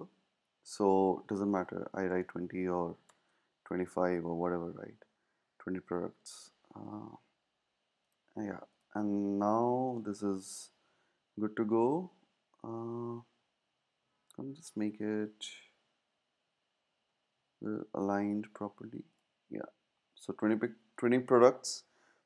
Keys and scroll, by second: 0.0-3.6 typing, 10.7 Left, 10.8 typing, 14.0 typing, 19.5 Down.